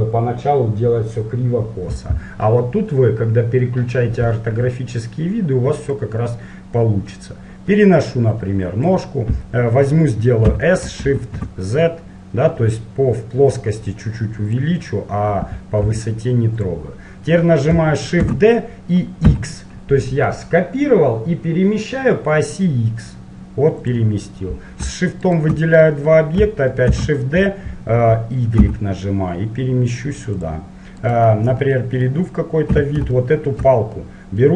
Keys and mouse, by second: 6.2-7.9 drag, 10.6 s, 16.0 g, 18.3 shift+d, 25.5-30.3 right drag, 27.0 shift+d, 31.2-32.6 right drag, 32.6-34.5 middle drag, 32.9 z.